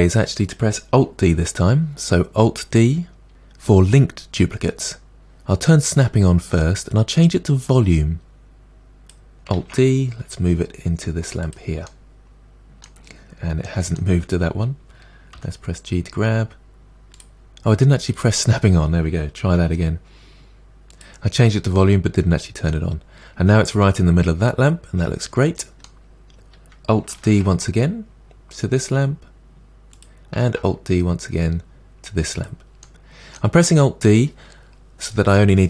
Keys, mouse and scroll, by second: 9.7 alt+d, 11.9-13.2 middle drag, 13.2-13.7 scroll down 2, 13.7-15.4 middle drag, 15.4 g, 18.2 click, 19.7 g, 22.7-25.7 middle drag, 27.3 alt+d, 30.5 alt+d, 32.8 middle click, 33.7-35.6 scroll down 1.